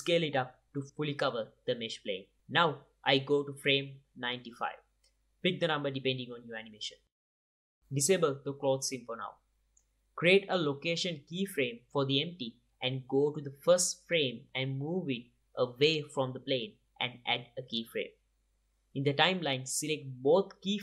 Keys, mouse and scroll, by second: 0.0 s, 1.1 drag, 1.3-2.2 middle drag, 1.5 KP_7, 2.2 click, 3.2-4.0 right drag, 5.2-7.7 right drag, 8.2-9.3 right drag, 9.3-12.4 drag, 11.7 i, 13.9 i, 15.3-16.1 drag, 16.3 g, 17.8 i, 20.2 t.